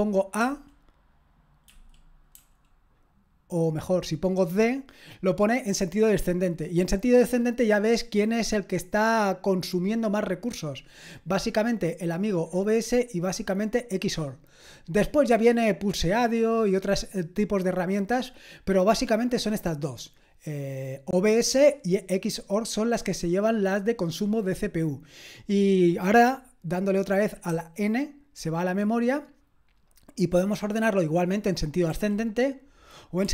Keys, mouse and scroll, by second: 0.4 typing, 2.1-2.9 typing, 31.9 a, 33.2 d.